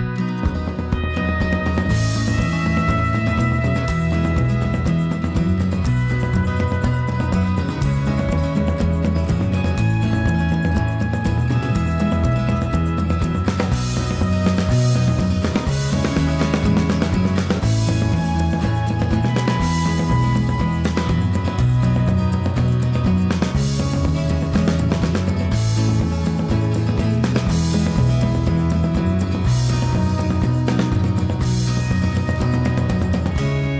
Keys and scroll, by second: 1.0-2.6 typing, 3.9-4.6 typing.